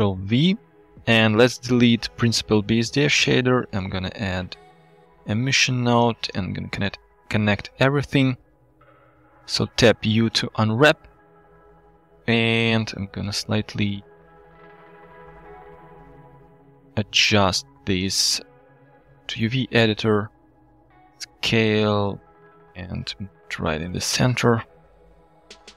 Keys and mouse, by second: 0.4 g, 0.7 click, 1.6 click, 2.9 x, 3.3 click, 3.6 shift+a, 5.1 click, 5.5 alt+drag, 6.4 alt+click, 8.0 middle drag, 8.1 click, 9.1 Tab, 9.8 u, 14.3 s, 15.4 ctrl+z, 18.3-19.4 drag, 20.0 click, 20.9 s, 22.2 click, 22.9 g, 24.9 KP_1.